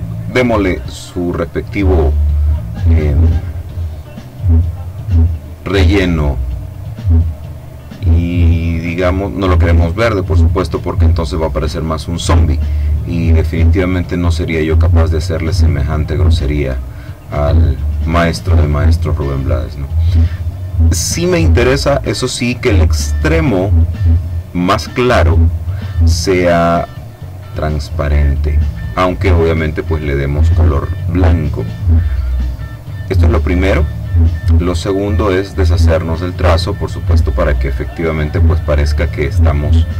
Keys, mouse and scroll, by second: 0.3 click, 4.6 click, 8.6-12.5 drag, 13.2-14.4 drag, 15.9-16.9 drag, 17.3-20.0 drag, 23.8-24.9 drag, 27.4-29.5 drag, 34.0 click, 35.5 click, 36.3 click.